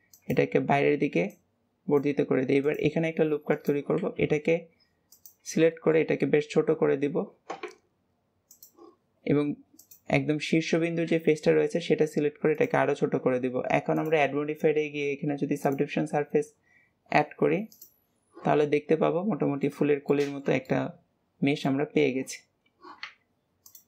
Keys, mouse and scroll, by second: 1.2 click, 2.3 ctrl+r, 4.0 s, 5.6 shift+middle click, 6.0-8.4 scroll up 1, 8.4 click, 9.7 click, 10.3-11.0 scroll up 1, 11.0 s, 13.8-17.0 drag, 17.6 click, 18.5-19.8 middle drag, 19.8 scroll up 1, 20.0-23.0 shift+middle drag, 23.0 Tab, 23.6 click.